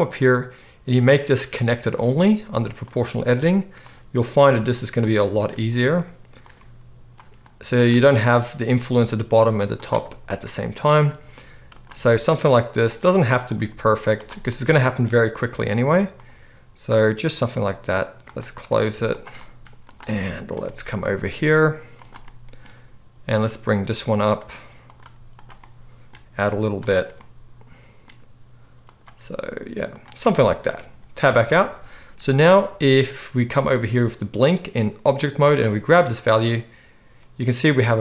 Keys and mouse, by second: 0.0-2.9 drag, 2.9-4.2 middle drag, 2.9 g, 4.2 click, 4.3-6.5 middle drag, 4.3 g, 5.8 g, 6.5 click, 6.6-9.7 middle drag, 6.6 g, 8.4 g, 9.7 click, 9.9-18.6 middle drag, 11.1 g, 13.5 g, 15.7 g, 17.6 g, 18.6 click, 18.9 shift+middle click, 19.0 shift+click, 19.1 shift+middle click, 19.6 alt+s, 19.8 click, 19.9-23.3 middle drag, 21.1 g, 23.3 click, 23.4-35.7 middle drag, 23.4 g, 25.3 g, 26.2 g, 29.0 g, 31.3 Tab, 35.7-38.0 drag.